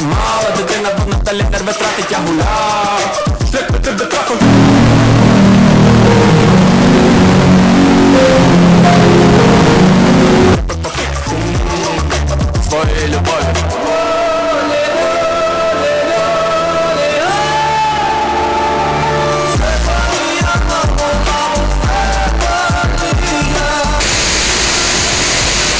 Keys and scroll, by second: 10.9 Page_Down, 11.7 Page_Down.